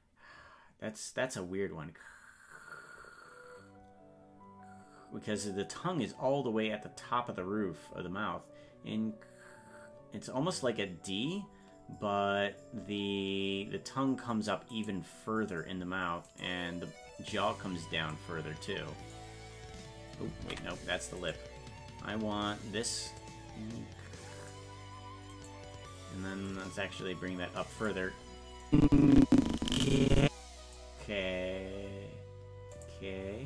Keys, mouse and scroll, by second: 15.0 right click, 18.1-19.1 drag, 20.5 ctrl+z, 21.5 right click, 23.2-24.5 drag, 25.6 right click, 26.5-27.9 drag, 28.7-30.8 drag, 32.8 click.